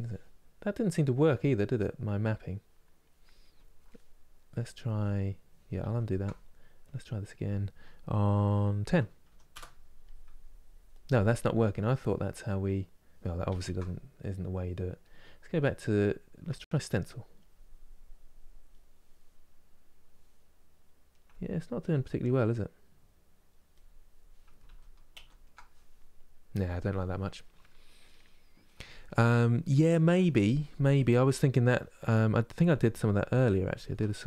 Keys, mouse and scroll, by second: 5.5 ctrl+z, 7.6-12.8 drag, 13.2 ctrl+z, 15.3-20.4 drag, 21.0-23.4 ctrl+middle drag, 23.4 click, 24.3 ctrl+z, 24.8 ctrl+z, 33.5 ctrl+z.